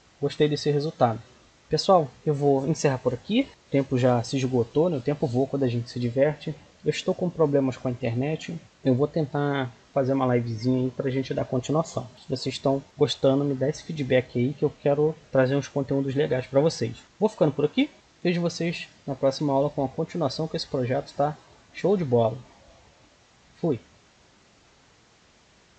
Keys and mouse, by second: 0.0 Escape.